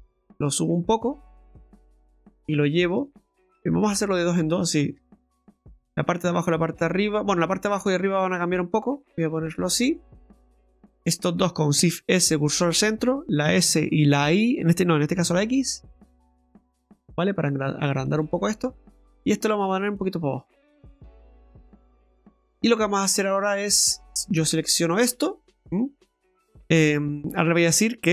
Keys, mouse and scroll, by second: 2.1 right click, 2.8 shift+right click, 3.9 ctrl+z, 5.0 ctrl+z, 5.5 ctrl+z, 8.3 click, 10.4 right click, 11.2 shift+right click, 11.9 shift+s, 13.5 s, 18.9 right click, 20.0 click, 22.0 middle click, 23.2 click, 23.9 right click, 24.4 alt+shift+right click, 24.6 alt+shift+right click, 25.2 scroll down 2, 25.4 middle click.